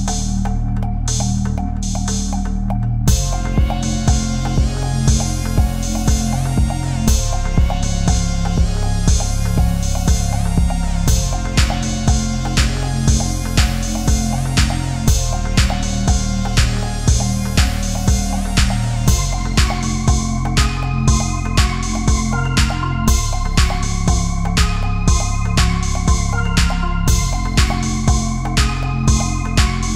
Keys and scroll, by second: 9.2 ctrl+-, 12.0 space, 27.1 ctrl+[.